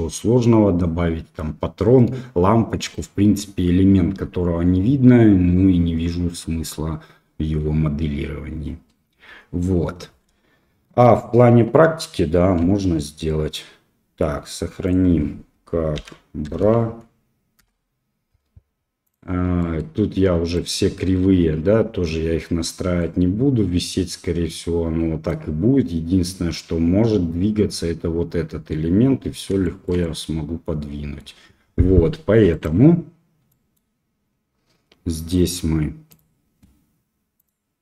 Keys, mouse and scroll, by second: 9.5-10.2 middle drag, 12.6 ctrl+s, 19.5 middle click, 20.5 right click, 22.9-25.2 middle drag, 29.6 shift+middle click, 30.0-31.2 middle drag, 32.5 click, 33.4 middle click.